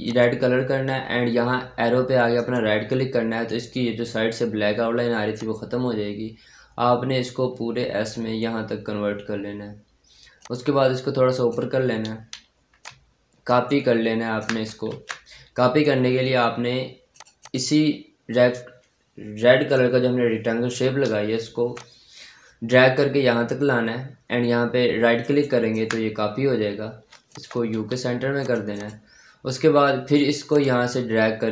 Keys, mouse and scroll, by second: 2.2 right click, 5.2-10.2 drag, 10.3-13.3 drag, 13.3 ctrl+right click, 14.8 ctrl+z, 16.5-17.0 scroll down 1, 17.0 click, 20.8-21.6 scroll up 1, 21.6-25.1 drag, 25.1 ctrl+right click, 26.1-26.5 scroll down 1, 26.5-27.0 scroll up 1, 27.1 click, 27.6 c, 27.9 scroll down 1, 28.3 click, 29.4-30.4 scroll up 1, 30.4-31.5 drag.